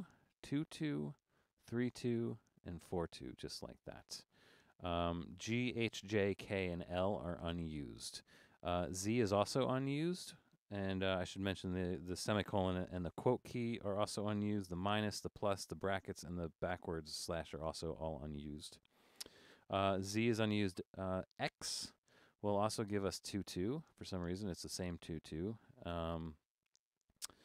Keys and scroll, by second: 0.0-3.9 typing, 23.5 typing, 25.5 typing.